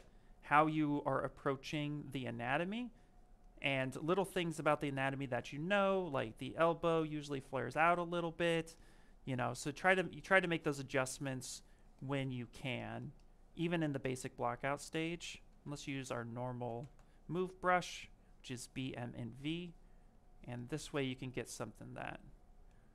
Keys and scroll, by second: 9.8 ctrl+z.